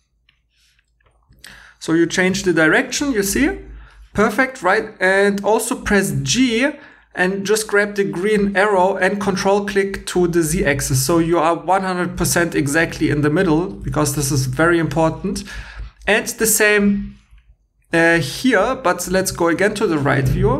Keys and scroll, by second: 1.1 super+Tab, 2.3 v, 6.1 g.